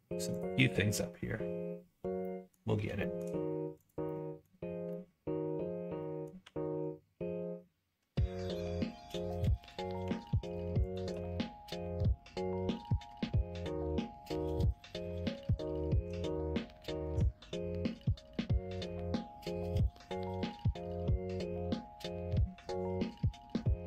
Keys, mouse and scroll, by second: 0.5 middle click, 2.2 middle click, 2.9 shift+middle click, 3.8 click, 4.0 middle click, 4.8-6.2 middle drag, 6.4 g, 10.0 2, 10.4 click, 10.8 shift+click, 11.3 middle click, 13.0 f, 13.9 middle click, 14.7 middle click, 15.2 middle click, 15.6 shift+middle click, 16.7 middle click, 17.4 shift+middle click, 18.3 middle click, 19.0 shift+middle click, 22.3 middle click.